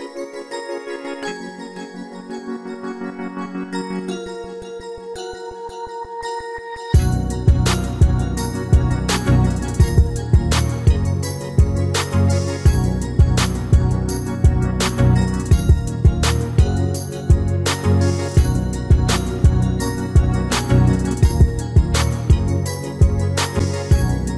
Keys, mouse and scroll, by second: 1.0-2.8 drag, 1.7-7.1 middle drag, 11.5 Tab, 12.3-14.1 middle drag.